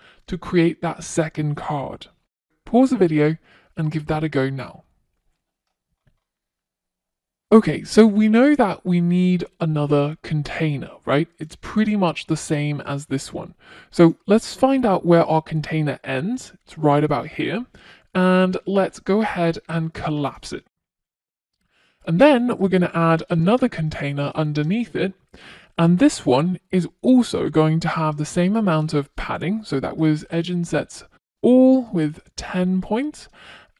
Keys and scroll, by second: 27.2 Return.